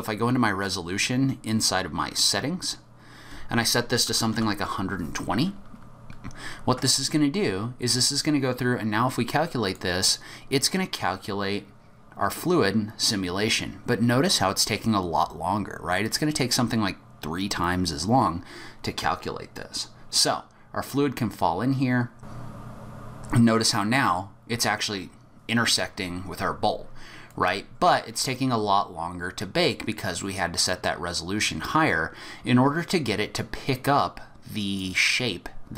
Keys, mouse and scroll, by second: 10.1 click, 19.5 click, 22.4 middle click, 22.6 click, 23.2 middle click, 23.2-23.8 scroll up 1, 23.8 middle click, 23.8-24.6 scroll up 2, 27.3 click.